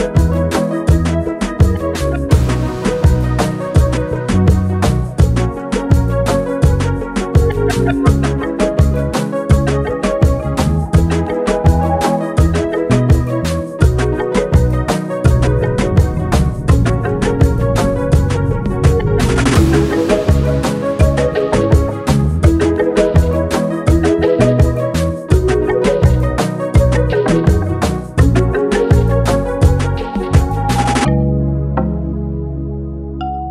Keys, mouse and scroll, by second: 1.9 click, 2.0-2.5 typing, 4.7-6.3 drag, 19.9-24.8 drag.